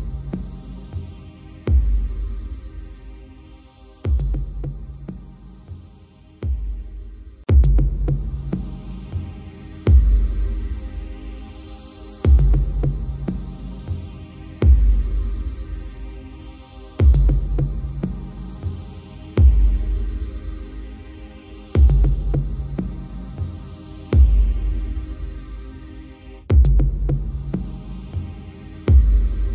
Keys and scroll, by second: 21.6 ctrl+j, 28.4 ctrl+=.